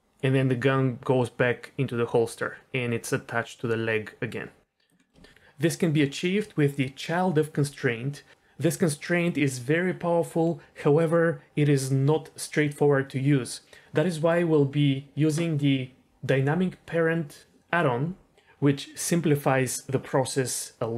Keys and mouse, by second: 5.0 middle click.